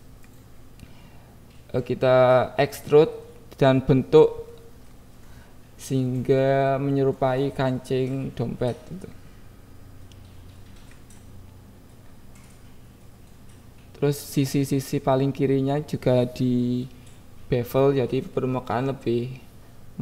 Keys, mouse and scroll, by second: 0.3 y, 1.1 click, 1.2 KP_1, 2.1 e, 3.3 click, 3.3 x, 3.8 click, 3.9 Tab, 4.2 click, 4.5 KP_1, 4.8 Tab, 5.2 Tab, 12.7 Tab, 14.0 ctrl+b, 14.4 v, 15.0 click, 15.1 Tab, 15.6 click, 15.9 KP_1, 18.4 click, 19.3 click.